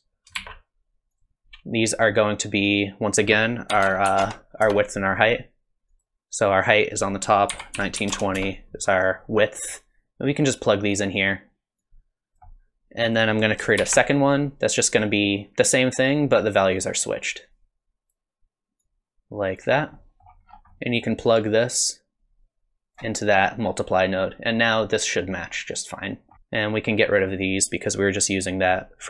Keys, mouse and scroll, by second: 0.4 shift+d, 3.1 click, 5.9 click, 10.3 click, 11.8 click, 13.0 click, 13.8 shift+d, 17.3 click, 18.8 click, 19.9 middle click, 20.5 scroll down 5, 20.7 middle click, 21.7 click, 26.3 middle click, 26.3 click.